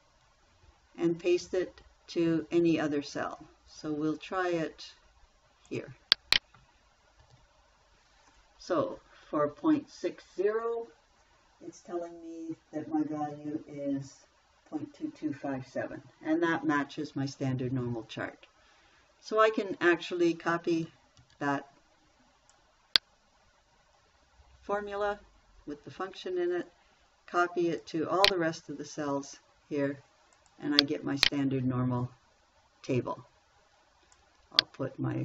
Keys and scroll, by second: 0.2 ctrl+c, 7.6 ctrl+v, 21.6 ctrl+c, 29.4 ctrl+v.